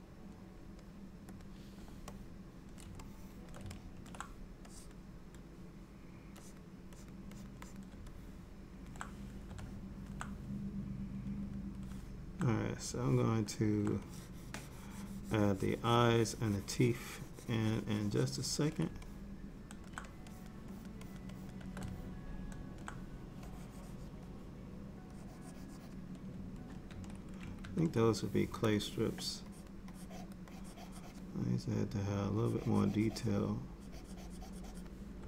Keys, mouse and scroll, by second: 1.5 click, 2.2 middle click, 3.1 shift+middle click, 3.8 ctrl+middle click, 4.8 click, 6.5 click, 7.0 click, 7.4 click, 7.7 click, 8.2 middle click, 9.7 middle click, 11.4 click, 11.9 click, 13.0 middle click, 14.1 ctrl+click, 19.1 middle click, 20.4 shift+click, 20.8 shift+click, 21.4 shift+click, 22.0 middle click, 23.5 click, 23.8 click, 25.2 click, 25.9 click, 27.0 ctrl+z, 27.7 ctrl+z, 28.8 click, 29.6 click, 30.0 click, 30.6 click, 32.5 click, 33.9 click.